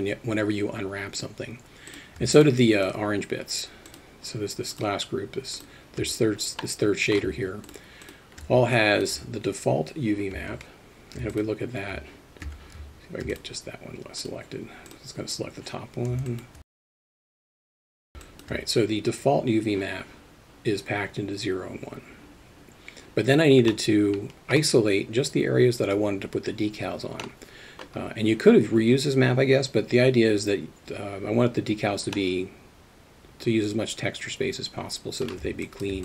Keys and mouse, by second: 1.9 click, 2.4 shift+click, 4.7 shift+click, 5.6 shift+click, 6.6-7.2 middle drag, 8.0 shift+click, 8.8 middle drag, 10.4 Tab, 11.3 shift+click, 12.5 Tab, 14.2 click, 16.3 alt+middle click, 16.6 click, 17.1 alt+middle click, 17.3 click, 17.5 shift+click, 17.7 middle click, 17.9 alt+shift+middle click, 18.0 shift+Tab, 18.1 shift+Tab, 18.2 alt+shift+middle click, 23.7-24.5 middle drag, 27.2 middle click, 32.2-35.2 middle drag, 35.7 alt+shift+middle click.